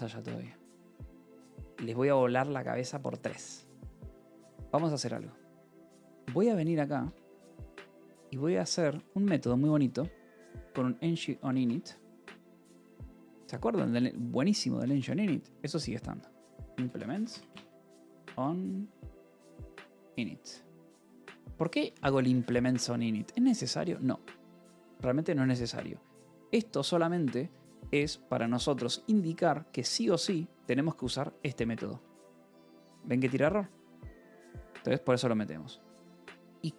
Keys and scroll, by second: 1.3 :, 1.7 k, 2.6 Return, 6.6 j, 6.9 Return, 7.5 j, 8.4 o, 8.7 Return, 9.7-13.1 typing, 12.7 Return, 12.8 Escape, 14.6-22.2 typing, 20.8 Escape, 22.7 Escape, 26.6-28.0 typing, 28.6 Escape, 30.4 j, 31.8 d, 32.1 Escape, 34.4-36.2 typing.